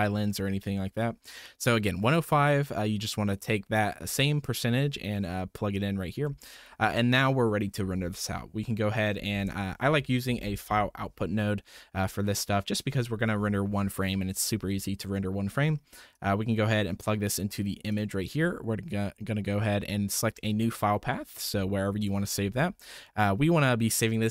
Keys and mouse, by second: 2.6 middle click, 6.2-6.6 middle drag, 9.3 shift+a, 16.1-17.5 drag, 17.9 click, 20.1 click.